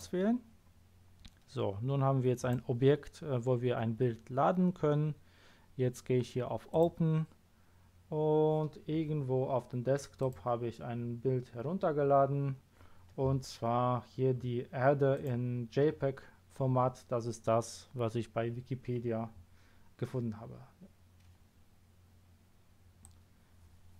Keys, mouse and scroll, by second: 2.3 click, 6.7 click, 10.2 click, 15.1 click, 23.0-23.9 drag.